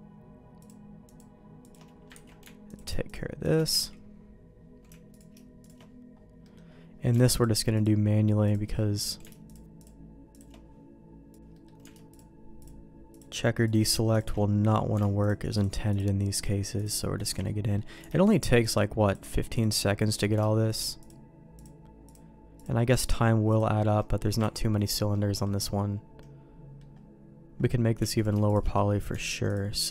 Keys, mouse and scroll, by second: 1.6 alt+shift+click, 2.1 ctrl+x, 3.9 ctrl+x, 6.4 middle click, 7.3-8.6 alt+shift+drag, 8.7 middle click, 11.4 ctrl+z, 11.4 shift+r, 11.5 middle click, 13.1-14.2 alt+shift+drag, 14.3 middle click, 15.2 alt+shift+click, 16.7 alt+shift+click, 17.4 middle click, 18.2-19.7 alt+shift+drag, 19.8 middle click, 21.5-23.8 alt+shift+drag, 23.9 middle click, 24.5 ctrl+x, 25.1 middle click, 26.2 middle click, 28.1 alt+click, 28.7 middle click.